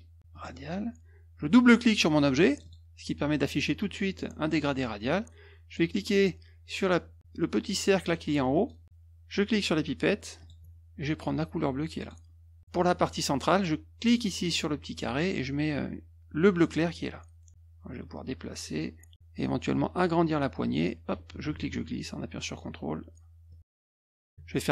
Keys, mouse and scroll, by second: 0.3 click, 2.5 click, 2.6 click, 8.5 click, 10.4 click, 12.0 click, 14.0 click, 16.6 click, 18.1-19.1 drag, 19.1 middle click, 20.6-22.5 drag, 23.5 click, 23.9 click.